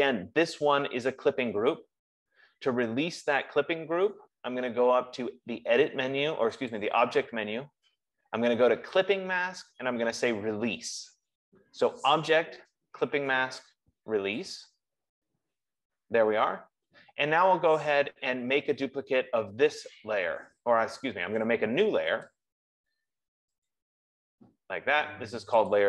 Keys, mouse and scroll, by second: 4.6 click, 7.4-12.1 drag, 15.0-20.0 drag, 22.8 click, 24.1 click.